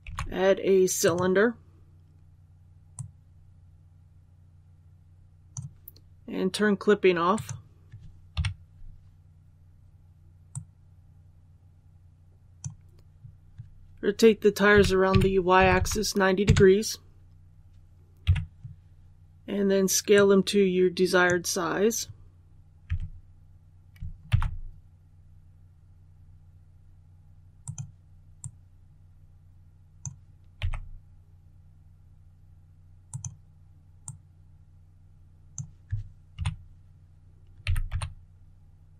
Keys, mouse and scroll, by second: 0.9-5.8 drag, 8.3 KP_1, 10.4-12.8 drag, 14.6-15.5 typing, 20.0-21.8 drag, 22.8 s, 24.2 shift+x, 27.5-30.5 drag, 30.5 s, 33.0-35.8 drag, 36.3 KP_1, 37.5 typing.